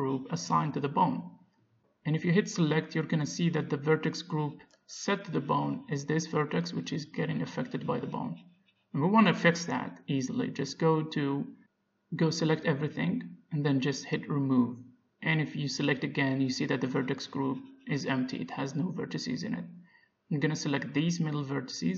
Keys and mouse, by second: 0.8 click, 1.9-3.1 middle drag, 3.1 Tab, 6.1 a, 7.1-9.3 drag, 9.3-13.2 middle drag, 13.2 a, 13.5 a, 14.8-16.4 drag, 16.5 a, 17.4-19.8 drag, 19.8-21.9 middle drag, 20.9 b.